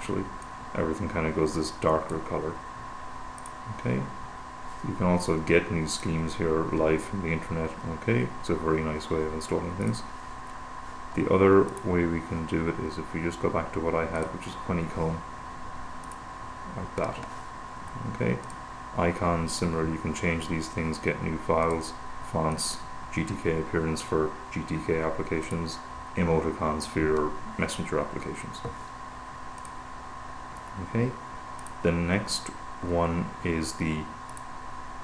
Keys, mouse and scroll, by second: 0.9-3.0 drag, 3.7 click, 6.4 click, 12.0 click, 14.5 click, 16.4 click, 18.9 click, 22.0 click, 22.9 click, 25.2-26.4 drag, 29.9 click, 32.0 click, 34.7 click.